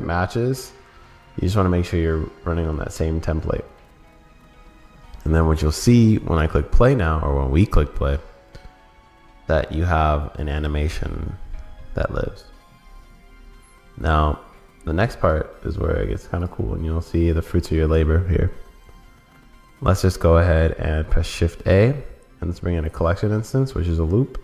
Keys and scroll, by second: 14.1 super+s.